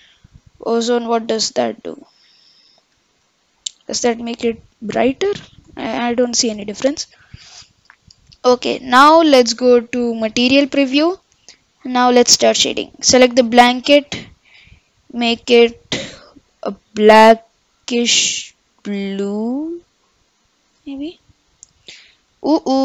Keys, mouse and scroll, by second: 3.2 ctrl+z, 10.5-11.9 drag, 14.1 click, 14.7 click, 15.0-16.0 drag, 21.2 middle click, 21.6-22.1 scroll up 6, 22.3-22.8 middle drag.